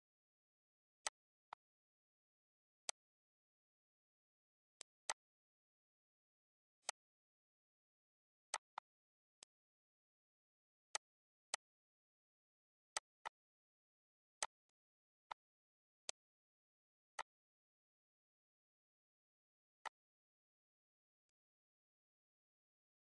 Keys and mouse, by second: 0.4 click, 1.0 click, 1.5 click, 1.8 ctrl+s, 2.3 click, 2.8 click, 3.9 click, 4.7 click, 5.8 click, 6.5 click, 8.5 click, 8.9 ctrl+s, 9.4 click, 10.9 click, 11.5 click, 12.9 click, 14.4 click, 14.9 ctrl+s, 15.2 click, 16.1 click, 16.5 click, 17.2 click, 18.2 ctrl+click, 19.2 click, 19.8 click, 21.0 click, 21.4 ctrl+s.